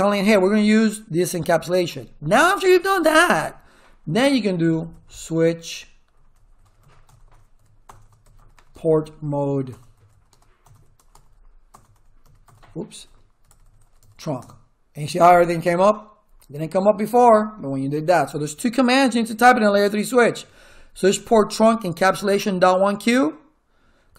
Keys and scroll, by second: 4.4-14.5 typing.